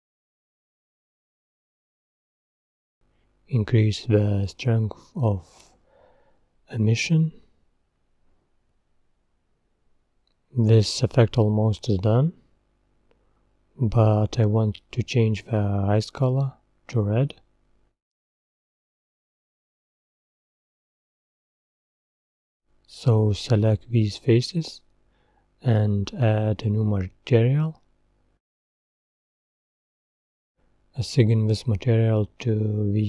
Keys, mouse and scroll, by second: 0.0-0.3 scroll up 4, 0.3-1.6 middle drag, 1.6-4.4 drag, 4.4 scroll down 3, 4.5-5.6 middle drag, 5.6-6.6 scroll down 1, 6.6-7.4 scroll down 1, 11.6 click, 12.2-12.5 scroll up 5, 12.8-13.9 middle drag, 13.9 scroll up 2, 14.3-14.7 scroll down 2, 15.9 click, 17.0 scroll up 1, 17.5 click, 19.0 Tab, 19.4-19.7 scroll up 5, 20.9-23.2 middle drag, 23.2 click, 23.6 scroll down 1, 24.6 click, 31.2-33.0 drag.